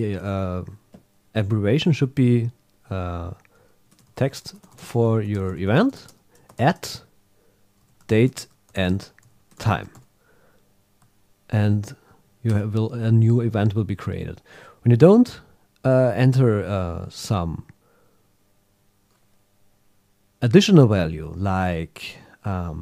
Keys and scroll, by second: 6.5 shift+@, 11.5 super+a.